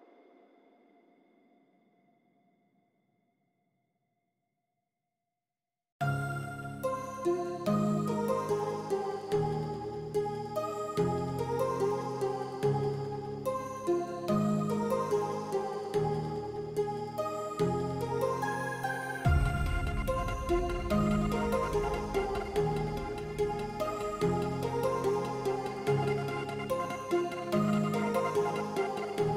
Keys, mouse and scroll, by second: 4.5-6.0 middle drag, 6.7 click, 7.1 Tab, 8.2 shift+middle click, 11.9 shift+middle click, 12.3 shift+middle click, 13.2 ctrl+click, 13.8 shift+middle click, 16.6 shift+middle click, 17.7 shift+middle click, 18.2 ctrl+click, 19.0 shift+middle click, 19.7 shift+middle click, 21.0 shift+middle click, 25.4 shift+middle click, 26.8 middle click, 27.2 shift+middle click, 28.5 shift+middle click, 29.1 shift+click.